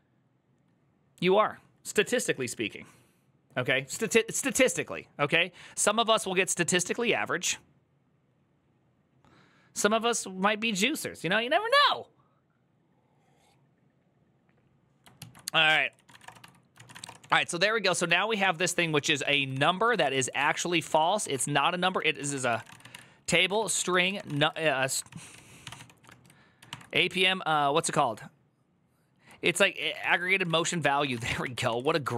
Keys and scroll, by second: 15.1 alt+{, 15.6 ctrl+c, 15.7-27.0 typing, 27.0 ctrl+n, 29.5-32.1 typing, 30.4 Return.